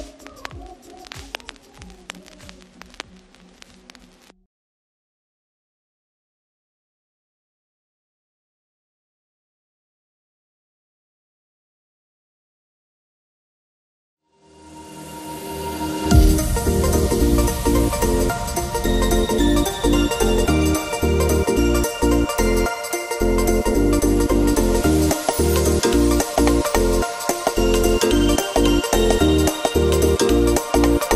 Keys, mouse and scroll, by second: 1.3 ctrl+-, 2.3 space, 2.6-3.0 click, 2.6 space, 3.3 click, 3.8-6.1 alt+drag, 6.6 ctrl+-, 6.8 space, 7.1 click, 7.1 space, 8.2 =, 8.4 =, 8.6-9.1 click, 8.9 space, 9.1-9.6 click, 10.4 space, 10.5 click, 10.8 space, 11.3-12.0 drag, 13.0-13.8 alt+shift+drag, 14.4 ctrl+=, 14.8 space, 14.8-15.3 click, 15.1 space, 15.4-15.8 click, 16.4-18.7 drag, 19.9-21.8 shift+drag, 22.3 Down, 23.5 click, 24.1 ctrl+=, 24.5 space, 24.6-25.1 click, 24.9 space, 26.1-26.8 drag, 29.6 Right.